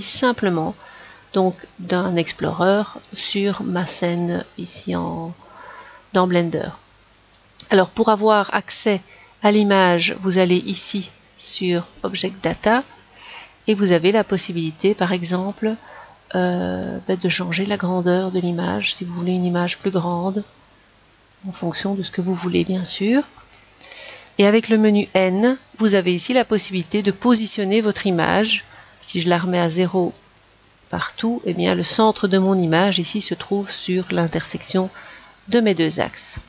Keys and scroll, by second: 25.0 n.